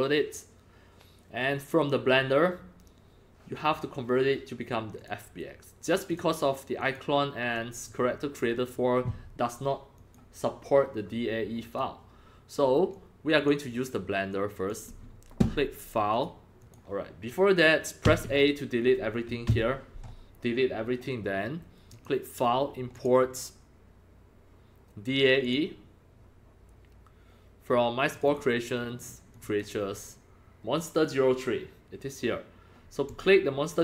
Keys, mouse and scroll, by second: 5.0 click, 6.1 click, 6.8 click, 7.9 click, 10.0 click, 11.7 click, 12.9 click, 14.3 click, 16.1 click, 16.6 click, 18.0 a, 19.5 Delete, 21.9 click, 22.9 click, 25.4 click, 28.1 click, 28.3 click, 29.3 click, 29.4 click, 33.1 click.